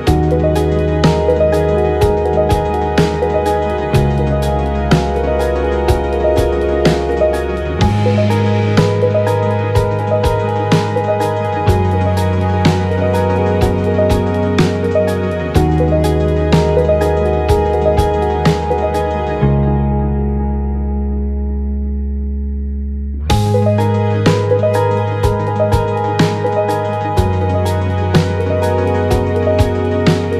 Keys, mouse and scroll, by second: 2.3 click, 6.3-12.8 drag, 12.8 shift+d, 13.4-16.5 drag, 17.5 click, 18.4-19.7 drag, 20.9 click, 21.6 click, 23.6 shift+d, 24.0 click, 25.0-27.2 drag.